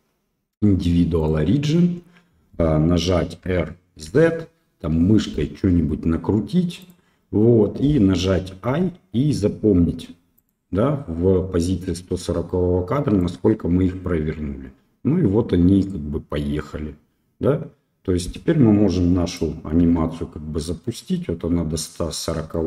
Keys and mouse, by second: 3.4 r, 13.2-19.3 drag, 19.8 space, 22.5-22.6 middle drag.